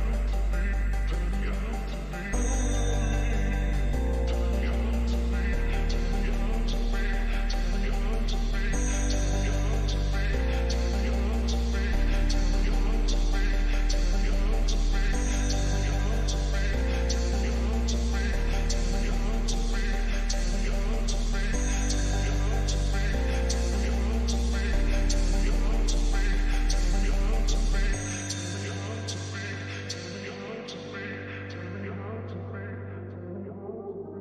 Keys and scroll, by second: 8.7 [, 11.5 ctrl+=, 34.0 ctrl+=.